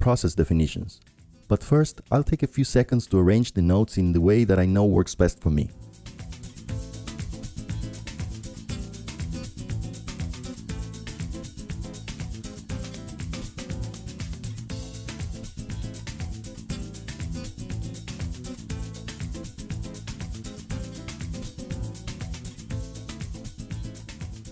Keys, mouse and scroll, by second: 2.6 click, 3.3-4.5 drag, 4.7 click, 6.5 click, 8.9 click, 10.4-11.6 drag, 12.0 click, 14.3 click, 16.1 click, 17.6 click, 18.2-19.4 drag, 19.8 click, 21.3 click, 23.6-24.5 drag.